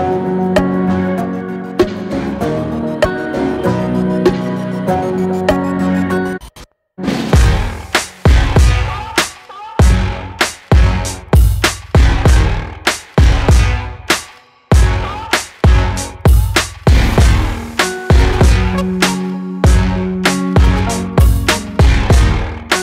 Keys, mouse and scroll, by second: 0.3-0.8 scroll up 2, 0.8-1.2 middle drag, 1.2-1.6 scroll down 2, 1.6-3.2 shift+middle drag, 3.2 scroll up 1, 3.8-5.1 shift+middle drag, 5.1 click, 5.4 Tab, 5.8 click, 7.0 Tab, 7.6-8.3 middle drag, 8.3 shift+a, 9.3 shift+a, 11.1 alt+middle click, 11.4 alt+middle click, 12.2 g, 14.9 shift+middle click, 15.2-15.5 scroll up 5, 15.3-16.1 shift+middle drag, 16.1 g, 18.1 alt+middle click, 18.5 shift+middle click, 19.4 g, 21.7-22.8 middle drag.